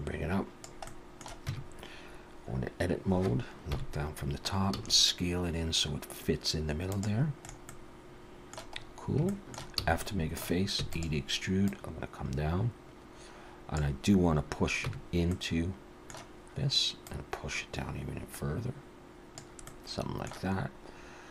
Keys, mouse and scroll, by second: 0.9 middle click, 1.5 Tab, 3.7 KP_7, 4.7 s, 7.4 middle click, 7.7 middle click, 7.7-8.8 scroll up 1, 8.8 scroll up 2, 9.3 shift+middle click, 9.8 f, 10.0 middle click, 10.8 e, 11.7 click, 14.9 Tab, 15.3 middle click, 17.1 click, 19.7 middle click.